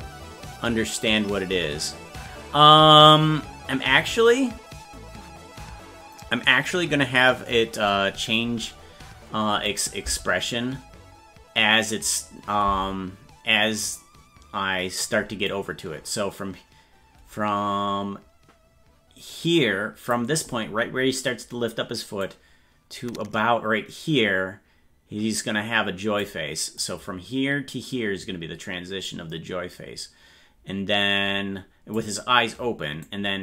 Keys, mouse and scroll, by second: 9.7 click, 10.0 space, 15.5-20.1 drag, 22.2-26.2 drag, 26.8-31.9 drag, 33.0-33.4 drag.